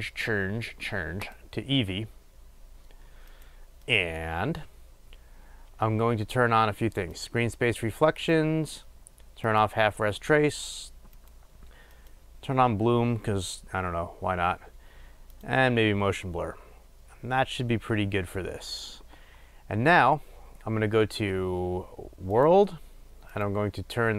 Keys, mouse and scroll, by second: 7.3 click, 9.7 click, 12.2 click, 15.5 click.